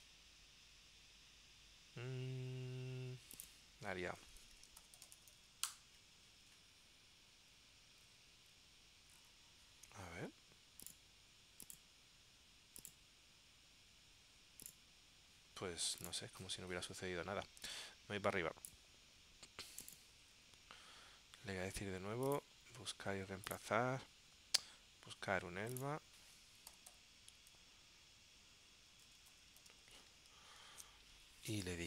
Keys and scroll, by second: 4.6 super+f, 26.9 shift+u.